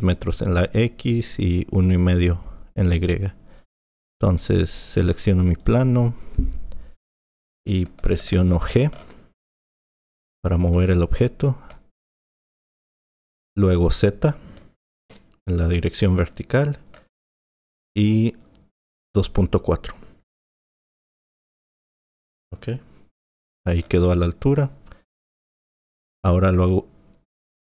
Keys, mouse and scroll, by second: 5.6 click, 10.0 g.